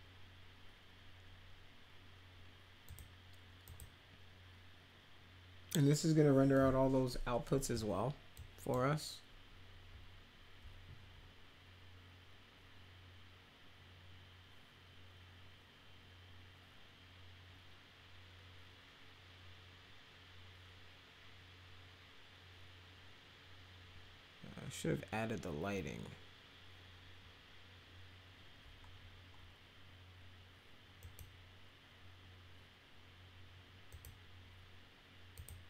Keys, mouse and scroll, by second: 2.9 click, 3.6 click, 8.3 click, 31.0 click, 33.9 click, 35.3 click.